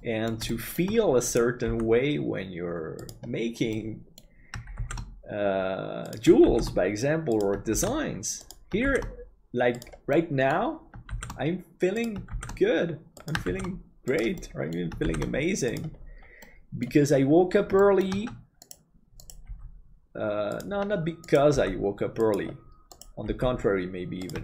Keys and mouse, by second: 0.1 middle click, 0.5 shift+middle click, 1.7 g, 3.8 middle click, 5.1 shift+d, 10.2 middle click, 14.4 middle click, 16.5 middle click, 17.8 shift+middle click, 19.5 g, 24.3 g.